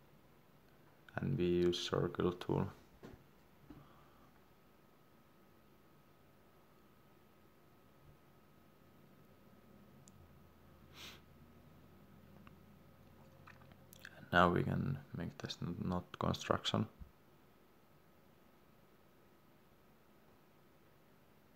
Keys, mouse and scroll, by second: 0.8 click, 6.1 scroll down 1, 8.7 click, 12.8 Escape, 14.6 click.